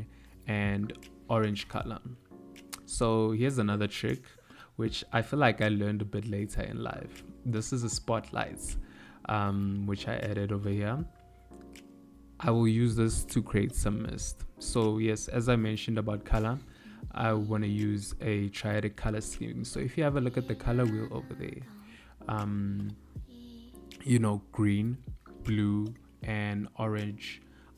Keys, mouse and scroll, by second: 1.4 g, 3.4 r, 4.9 g, 5.9 r, 6.9 s, 9.3 g, 14.0 click, 20.3 click, 22.5 KP_0.